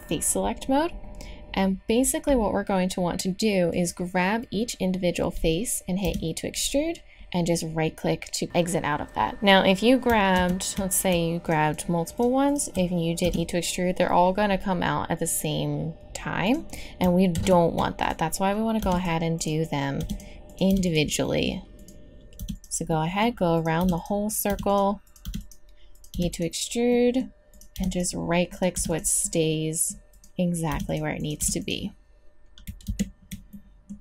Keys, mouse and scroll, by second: 1.0-2.1 middle drag, 3.7 right click, 5.0 middle click, 6.0 e, 10.3 ctrl+z, 11.4-13.2 drag, 13.2 e, 17.0 middle click, 17.3 ctrl+z, 18.8 e, 20.0 e, 20.7 e, 21.4 click, 22.4 e, 23.5 click, 23.8 e, 24.5 e, 25.2 e, 26.2 e, 26.9 click, 27.7 e, 28.7 e, 30.1 right click, 30.7 e, 31.4 e, 32.8 ctrl+z.